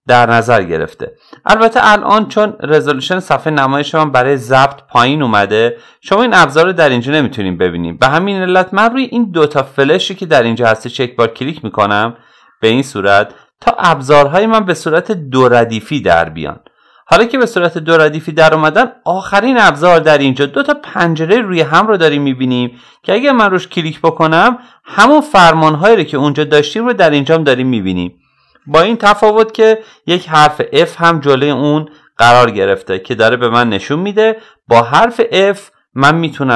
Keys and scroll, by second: 29.8 f.